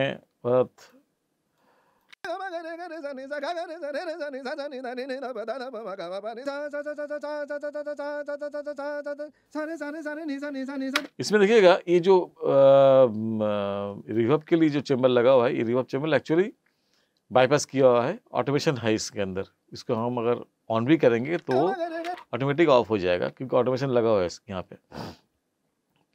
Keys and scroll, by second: 2.1 space, 11.0 space, 21.4 space.